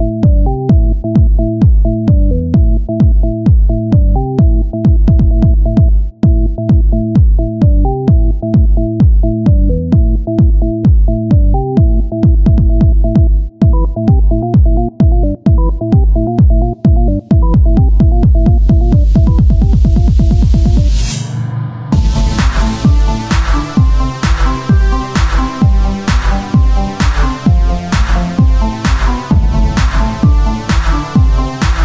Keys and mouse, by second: 0.3 ctrl+Tab, 0.3 z, 0.9 z, 1.4 c, 3.1 z, 3.3-5.2 drag, 6.3 Tab, 7.8-11.0 drag, 11.0 Tab, 12.4 KP_1, 13.2 KP_3, 13.8 z, 14.0 c, 17.4-19.6 drag, 19.6 o, 20.3 s, 22.0 s, 23.6 click, 23.6 z, 24.3 Tab.